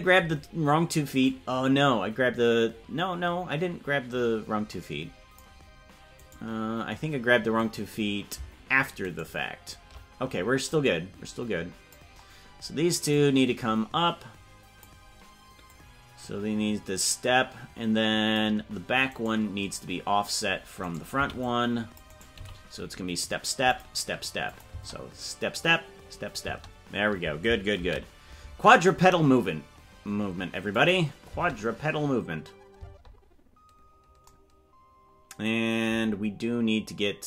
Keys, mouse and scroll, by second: 1.3-5.5 drag, 9.4 shift+right click, 10.8-12.0 drag, 13.1-14.9 drag, 15.8-18.5 drag, 19.4 right click, 21.1 c, 24.6 click, 24.7 space, 30.3 ctrl+s, 30.8 click, 31.3 space.